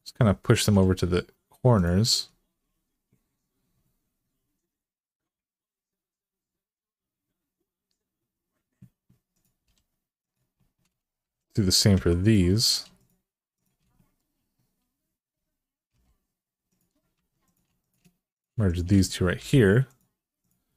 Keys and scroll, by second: 0.4 g, 9.4 g, 11.0-11.7 typing, 15.7 e, 16.9 1, 19.2 m, 20.6 g.